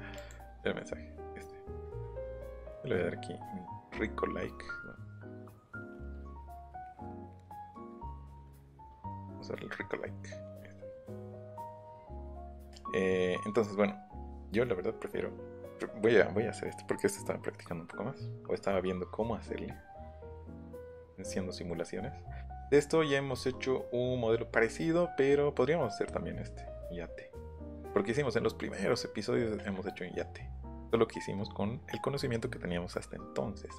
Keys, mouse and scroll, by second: 0.2 click, 2.3 click, 4.6-5.2 scroll down 3, 5.6 scroll up 1, 6.4 click, 9.2 click, 20.5 middle click, 20.5-22.7 scroll down 7, 20.9 middle click, 23.3 scroll down 1, 26.8 scroll up 1, 27.3-29.2 scroll down 9.